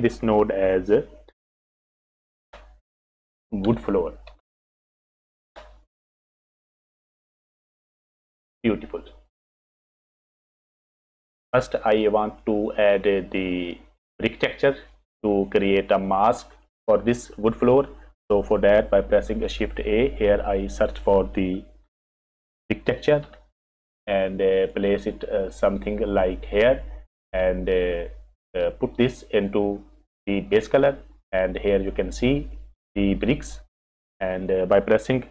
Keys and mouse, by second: 3.1 o, 6.4 o, 9.7 click, 11.1 F6, 12.5 click, 13.6 click, 13.8 click, 15.0 click, 16.0 click, 19.4 shift+a, 29.1-30.6 drag, 32.9 click.